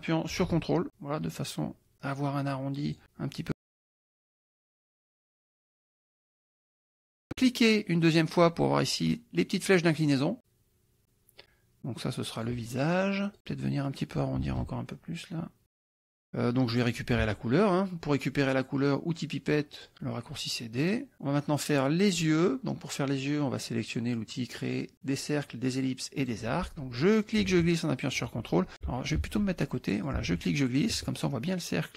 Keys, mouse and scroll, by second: 7.5 click, 10.0-12.7 drag, 14.0-15.6 drag, 19.8 click, 20.8 click, 26.2 click, 27.2-28.4 ctrl+drag, 29.2 ctrl+z, 30.1-31.9 ctrl+drag.